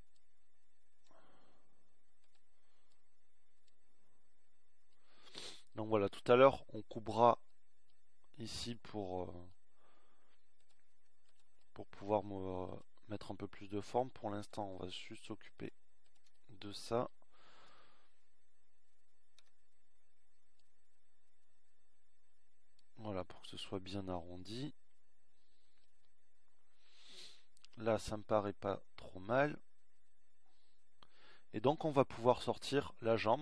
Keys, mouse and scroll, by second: 20.1 KP_1, 21.8 z, 30.6 z.